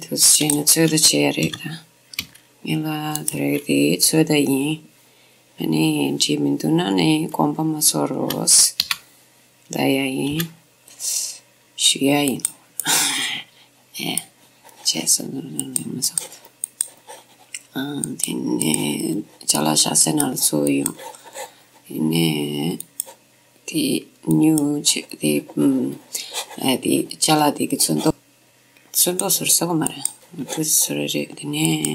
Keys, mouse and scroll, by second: 1.5 g, 3.4-5.4 right drag, 9.0 o, 10.5 g, 12.6 click, 12.9 middle click, 13.0 middle click, 13.1 click, 13.7 click, 14.1 click, 14.1-16.5 middle drag, 15.8-19.9 drag, 19.2 middle click, 19.4-22.4 middle drag, 20.8-22.6 drag, 22.9-26.1 drag, 29.1-31.7 drag, 31.8 click.